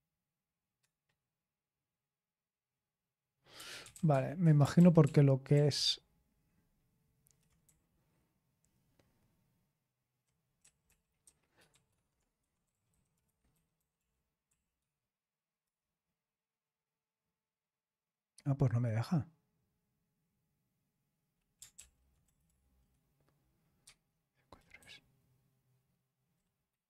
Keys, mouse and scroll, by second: 0.7 Return, 3.3-4.5 typing, 4.7 ctrl+p, 5.0 ctrl+p, 5.5 ctrl+p, 7.6-10.1 Left, 10.1 typing, 10.5 Right, 10.8 Right, 11.4-14.7 typing, 21.7 ctrl+p, 22.2 BackSpace, 22.4 BackSpace, 23.8 Tab, 24.7 Left, 25.4 Left, 25.4-26.2 Left, 26.8 BackSpace.